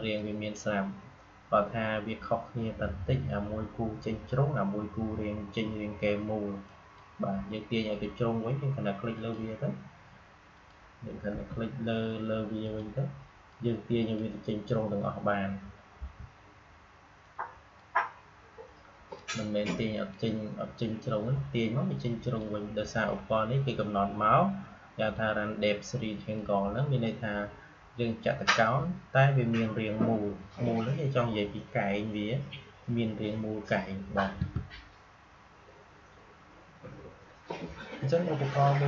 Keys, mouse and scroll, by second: 6.6 click, 9.0 click, 11.2 v, 12.5-15.9 drag, 15.9 a, 17.1-24.9 drag, 26.3-29.6 drag, 34.3 Delete.